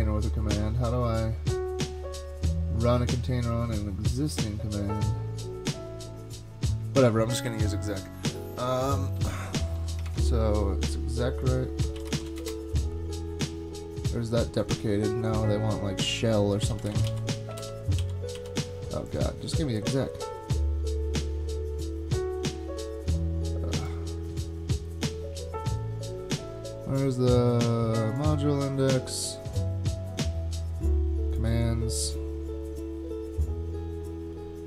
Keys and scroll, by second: 7.5 super+Tab, 10.1 super+Tab, 11.6-12.7 typing, 16.6-17.6 typing, 17.6 super+g, 18.0 super+g, 18.4 super+g.